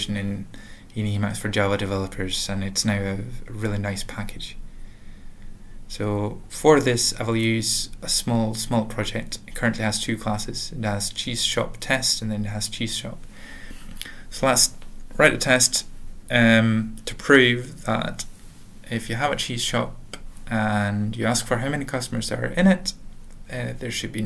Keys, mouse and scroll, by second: 7.5-8.2 typing, 9.0 Return, 11.5-14.1 typing, 14.4 Tab, 15.2 ctrl+alt+\, 17.1 alt+Return, 17.2-17.9 typing, 19.0 alt+x, 19.1-21.7 typing, 22.0 Return.